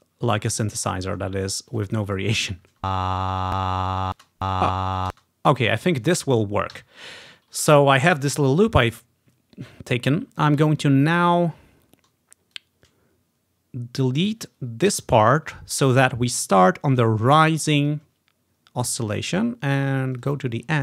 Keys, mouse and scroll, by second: 0.1 ctrl+scroll up 1, 0.7-3.4 drag, 2.8 space, 4.2 space, 5.2 space, 5.7-7.5 drag, 6.8 Delete, 8.2-8.7 ctrl+scroll up 2, 9.2 ctrl+scroll up 1, 10.2 ctrl+scroll up 1, 11.6 ctrl+scroll up 1, 11.9 ctrl+scroll down 1, 12.6-14.4 drag, 15.0 Delete, 16.1-16.5 ctrl+scroll up 1, 18.1-19.9 ctrl+scroll down 1, 20.3-20.8 ctrl+drag, 20.5 ctrl+scroll up 1.